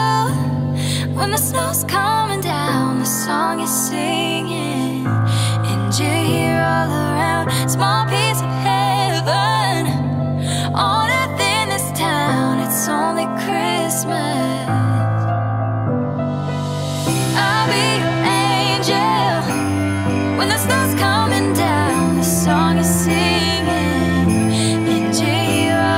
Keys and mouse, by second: 1.5 click, 1.8 g, 2.0 y, 2.9 click, 3.3 g, 3.7 x, 5.1 g, 5.4 y, 6.2 click, 6.8 click, 11.2 shift+d, 12.8 shift+z, 16.7 g, 16.9 z, 22.7-25.3 drag.